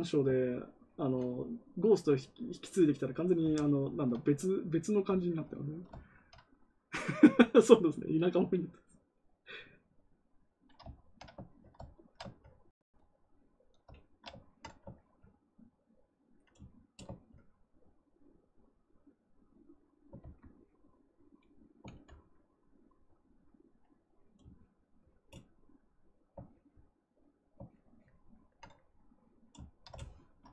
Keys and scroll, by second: 20.1 ctrl+z, 21.8 ctrl+z.